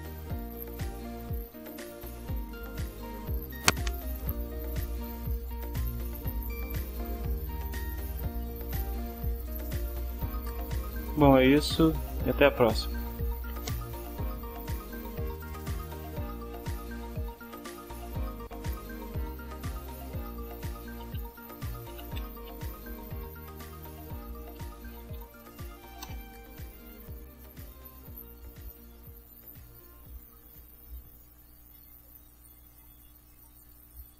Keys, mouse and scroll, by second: 1.4 drag, 16.4 ctrl+s, 17.1-25.5 typing, 26.0 Return, 31.9 click, 32.7 click.